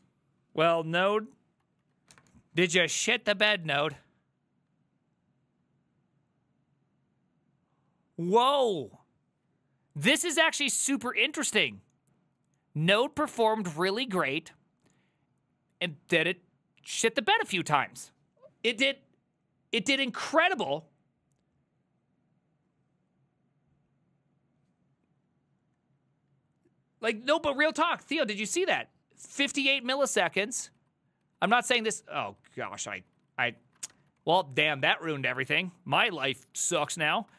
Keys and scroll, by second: 1.9 alt+{, 28.4 ctrl+a, 28.6 [, 30.3 ctrl+u, 30.8 ctrl+u, 31.3 ctrl+u, 31.6 ctrl+u, 31.7 ctrl+u, 31.9 ctrl+u, 32.1 ctrl+u, 32.3 ctrl+u, 32.4 ctrl+u, 32.6 ctrl+u, 32.7 ctrl+u, 32.9 ctrl+u, 33.0 ctrl+u, 33.2 ctrl+u, 33.3 ctrl+u, 33.5 ctrl+u, 33.7 ctrl+u, 33.9 shift+a, 34.2 ctrl+c, 34.3 ctrl+c, 34.5 ctrl+c, 36.8 Up, 37.3 ctrl+a.